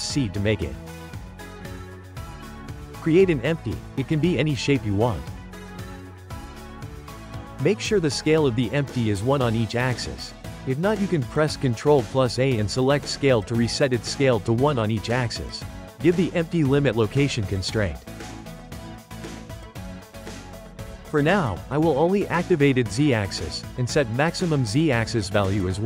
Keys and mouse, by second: 2.5 shift+a, 6.8 s, 8.4 n, 9.1-11.0 shift+middle drag, 11.0 shift+a, 12.9 ctrl+a, 15.1 click, 16.7-19.7 drag, 21.4 click, 22.4 click, 24.2-25.8 drag.